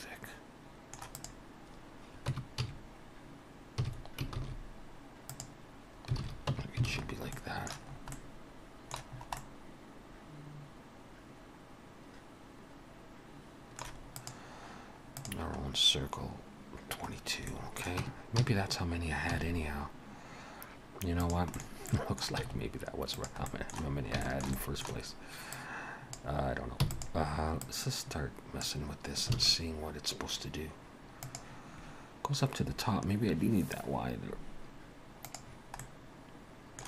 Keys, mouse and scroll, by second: 1.2 click, 2.3 Tab, 2.6 a, 3.8 s, 6.2 alt+a, 6.5 Tab, 6.9 alt+a, 7.1-7.9 scroll down 3, 7.4 middle click, 7.9 scroll up 2, 8.1 middle click, 9.1 scroll up 2, 9.4 middle click, 14.4 middle click, 15.7-16.2 scroll down 2, 17.1-17.5 scroll down 3, 17.5 middle click, 18.0 Tab, 18.4 a, 19.3 s, 21.5 middle click, 21.6 scroll up 2, 21.9 middle click, 22.4 s, 23.5 middle click, 23.8 scroll down 3, 24.3 shift+middle click, 24.5 middle click, 25.5 click, 26.8 e, 27.6 click, 29.4 alt+a, 35.8 middle click.